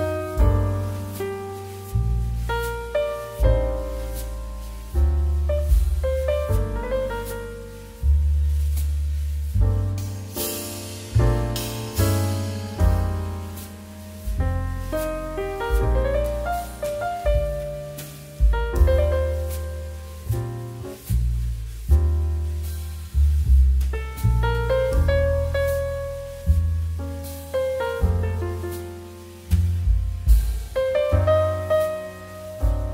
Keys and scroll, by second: 4.7 2, 5.3 shift+2, 8.9 shift+f, 29.5 2, 29.9 space.